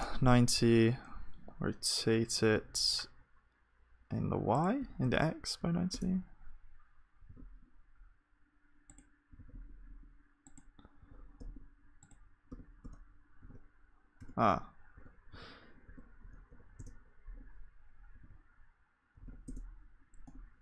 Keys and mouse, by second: 18.1 r, 20.2-20.6 middle drag.